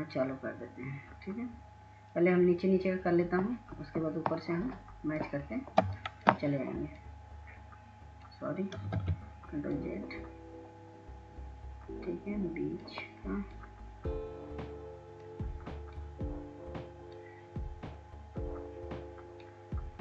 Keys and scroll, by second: 11.8 ctrl+z.